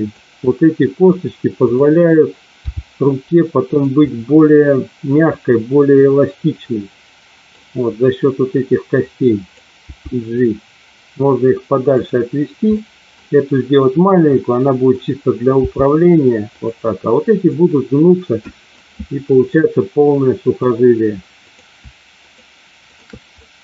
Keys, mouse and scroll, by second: 0.5 middle click, 1.7 click, 2.7 g, 4.0-7.5 middle drag, 8.9 click, 11.1 g, 11.9 click, 12.7 middle click, 14.4 middle click, 15.5 g, 16.5 click, 17.4-18.7 middle drag, 19.4-20.7 middle drag, 21.4 click, 22.2 shift+click, 22.8 shift+click, 23.3 middle click.